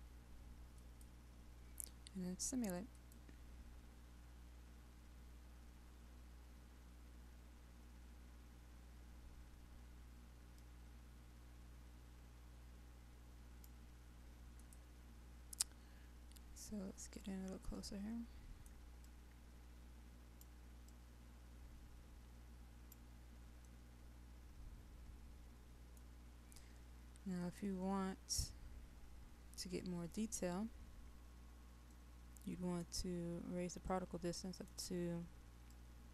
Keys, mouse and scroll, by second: 10.6-14.6 right drag, 15.3-17.8 scroll down 1, 17.8 middle click, 19.0-23.6 right drag, 24.6-26.6 middle drag, 27.4 click, 30.4-30.8 scroll up 1, 30.8-32.0 scroll down 1, 32.0 middle click, 33.4-33.9 scroll down 1, 33.9 middle click.